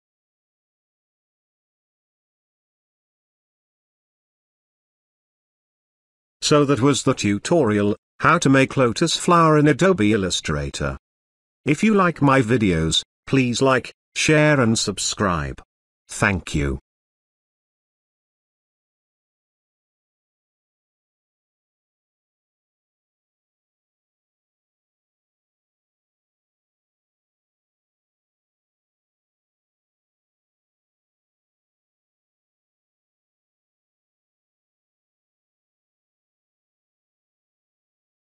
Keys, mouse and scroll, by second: 5.4-9.0 drag, 21.7-23.3 shift+drag, 24.8 space, 25.0 click, 25.4 space, 25.7-28.5 ctrl+drag, 31.9-33.9 drag.